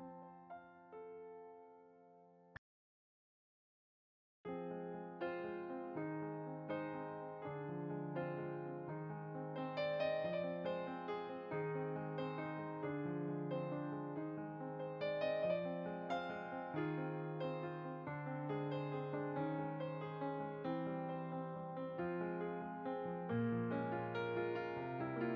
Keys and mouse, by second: 0.0 click, 0.2 ctrl+z, 0.7 s, 1.0 y, 2.3 click, 5.1-5.9 typing, 7.2 click, 7.7-8.5 typing, 9.2 click, 11.6 g, 11.7 g, 12.9 click, 14.1 g, 14.9 click, 15.9 g, 17.0 click, 22.5 g, 24.3 click.